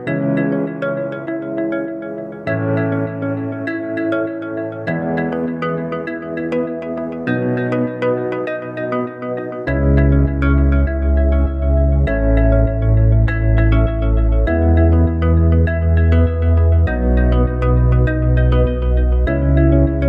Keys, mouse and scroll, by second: 4.2 shift+a, 8.1 click, 11.2 KP_1, 11.7 KP_3, 14.0 click, 15.8 s, 17.7 s.